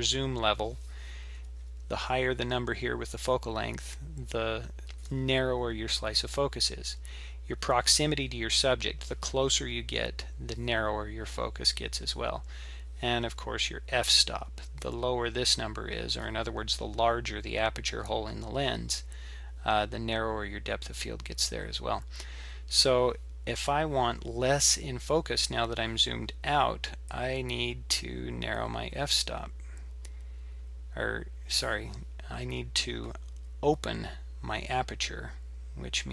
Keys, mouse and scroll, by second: 27.1 click, 27.3 click.